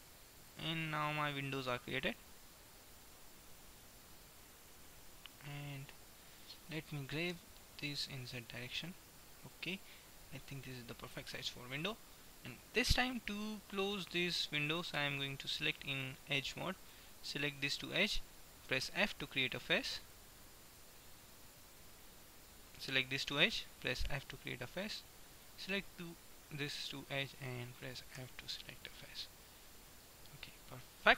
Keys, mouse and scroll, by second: 3.8-5.4 middle drag, 7.4 g, 9.9 middle click, 11.1-12.9 middle drag, 15.3-16.9 drag, 16.9 middle click, 17.8-19.1 right drag, 18.9 f, 19.1 middle click, 20.1-21.8 middle drag, 21.8-22.8 right drag, 23.4 f, 24.4-27.3 right drag, 28.3 f, 29.1-31.1 middle drag.